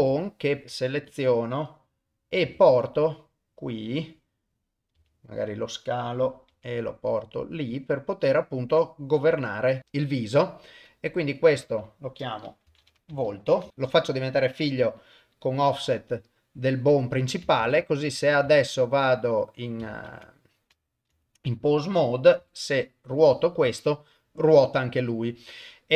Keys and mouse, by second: 0.0 g, 0.6 alt+click, 2.4 g, 5.1 s, 6.5 g, 11.5 F2, 13.7 ctrl+o, 13.8 ctrl+p, 17.1 click, 17.6 ctrl+Tab, 18.3 ctrl+Tab, 18.7 ctrl+Tab, 20.1 ctrl+Tab, 21.4 click, 22.4 r.